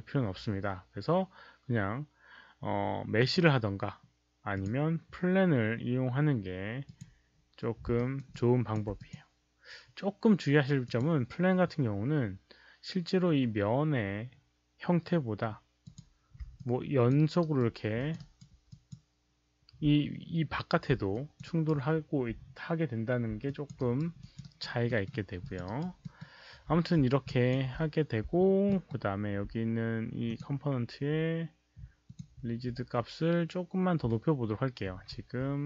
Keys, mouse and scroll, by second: 3.1 click, 4.5 click, 6.8 click, 7.9 alt+right click, 8.3 alt+click, 8.9 alt+click, 10.4 alt+right click, 10.8 alt+click, 15.3 alt+right click, 15.8 alt+click, 16.5 alt+click, 17.3 alt+right click, 17.9 alt+click, 18.1 alt+right click, 18.6 alt+click, 19.8 alt+click, 19.8 alt+right click, 21.1 alt+click, 21.4 alt+right click, 22.3 q, 23.2 alt+q, 23.4 alt+click, 23.6 alt+q, 23.7 alt+right click, 24.1 alt+click, 24.3 alt+right click, 24.8 alt+middle click, 25.4 alt+click, 25.6 alt+right click, 25.9 alt+middle click, 27.2 alt+click, 27.6 alt+right click, 28.3-28.8 alt+middle drag, 28.3 alt+click, 28.3 alt+right click, 28.7 alt+right click, 30.2 alt+click, 30.2 alt+middle click, 30.2 alt+right click, 30.3 alt+middle click, 30.3 alt+right click, 32.0 alt+click, 34.8 ctrl+a.